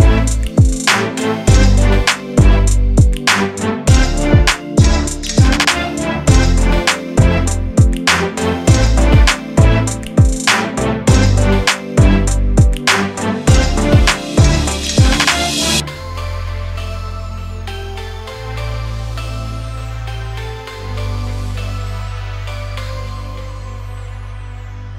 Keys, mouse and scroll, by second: 0.3 s, 1.3 r, 2.6 g, 4.5 Tab, 4.8 click, 5.3 g, 6.8 Tab, 7.2-7.5 scroll down 1, 7.5-8.9 scroll up 1, 8.9-10.5 middle drag, 11.3 click, 11.7 scroll up 1, 11.9-12.9 shift+middle drag, 12.9 click, 13.1 Tab, 13.7 click, 14.3 g, 16.0 Tab, 16.4 click, 17.1 click, 17.3-18.0 scroll down 7, 18.0 click, 18.6 click, 19.2 click, 19.7-21.3 drag, 21.3 Tab, 21.5-22.1 scroll up 1, 22.1-22.5 scroll down 2, 22.5 Tab, 22.7 click, 23.0 click, 24.3 click, 24.8-24.9 middle drag.